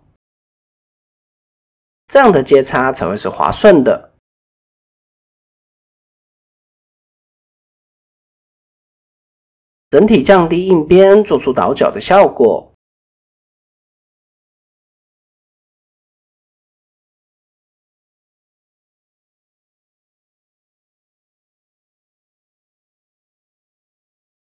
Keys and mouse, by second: 0.2 click, 0.9-1.9 middle drag, 2.2 click, 3.1 middle click, 3.5 click, 4.2 KP_7, 5.0 click, 5.8 middle click, 6.9 KP_1, 7.8 shift+middle click, 9.3 a, 10.6 click, 10.8 click, 11.0 click, 11.7 middle click, 12.5 middle click, 13.7 KP_1, 14.4 shift+middle click, 15.4 click, 16.5 click, 17.1 click, 20.7 click, 21.8 click, 23.1 click, 23.4 middle click, 24.2 middle click.